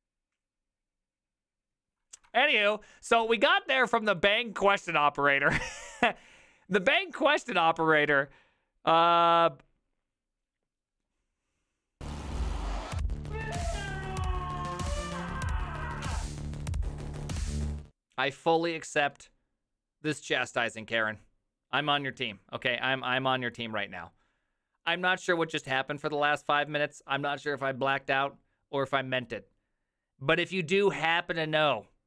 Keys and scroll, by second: 2.3 ctrl+w.